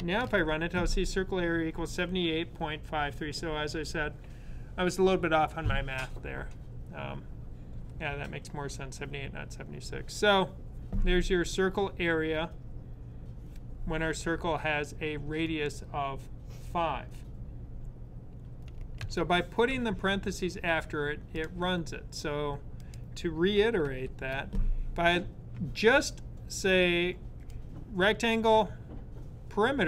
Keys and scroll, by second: 0.0 super+r, 23.7 super+/.